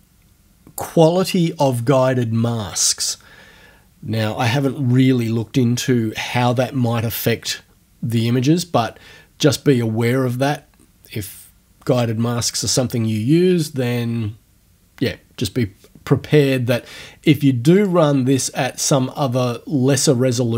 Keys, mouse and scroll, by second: 17.8 click.